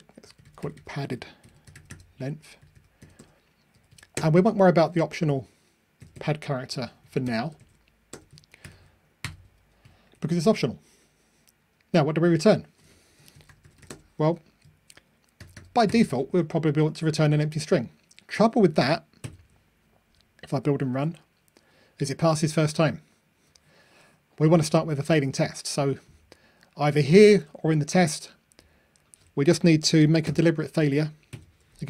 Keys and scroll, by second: 19.3 super+F9, 20.9 ctrl+r, 31.4 super+F9.